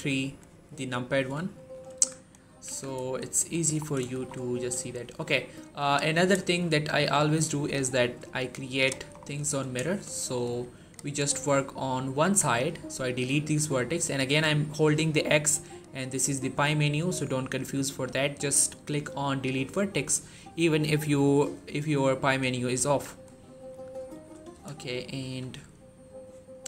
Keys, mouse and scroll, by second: 1.4 shift+middle click, 1.8-2.5 typing, 3.4 shift+middle click, 3.6-4.0 shift+scroll up 2, 4.0 shift+middle click, 4.4 scroll down 1, 4.8 shift+middle click, 5.2-5.7 scroll down 1, 5.7 click, 6.3 shift+middle click, 7.5-8.8 drag, 9.0 scroll up 1, 9.8 shift+middle click, 9.9 shift+scroll up 2, 10.3-11.0 shift+click, 11.0 scroll down 2, 11.2 shift+middle click, 11.6-22.6 typing, 23.2-23.6 scroll down 1, 23.9 shift+middle click, 24.4 z, 24.6-25.3 shift+middle drag.